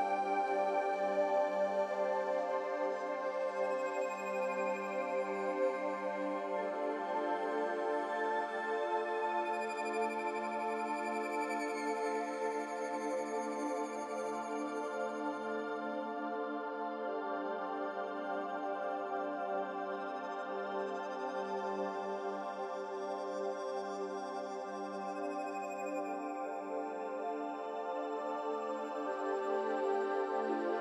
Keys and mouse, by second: 1.1 ctrl+r, 4.6 3, 5.5-6.1 alt+shift+drag, 6.2 s, 8.6 Tab, 11.5 click, 13.3 shift+a, 15.2 s, 17.5 g, 19.1 g, 27.0 d, 27.3 y, 29.1 click, 29.7 g.